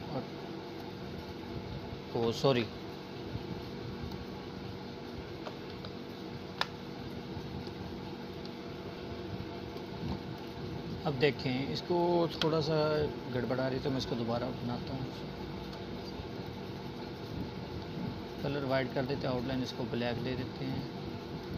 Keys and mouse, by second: 0.6 click, 2.1 ctrl+z, 3.1 ctrl+z, 5.9 click, 8.4 Delete, 9.4 click, 10.7-12.0 alt+shift+drag.